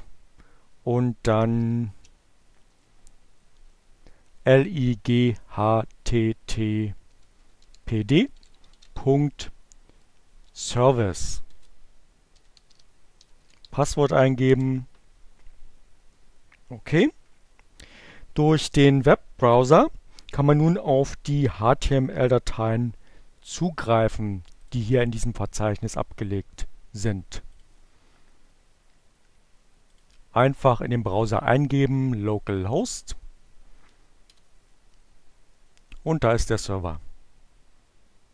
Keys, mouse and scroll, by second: 0.0-0.4 typing, 2.2 h, 4.6-5.4 typing, 7.0-8.5 typing, 9.6-13.1 typing, 10.7 shift+Return, 24.0 click, 27.0 click, 29.2 click, 30.8-32.2 drag, 32.9 Return.